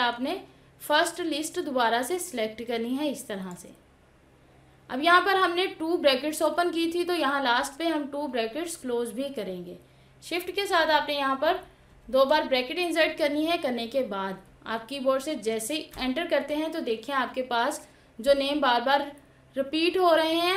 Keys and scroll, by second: 15.2 Return.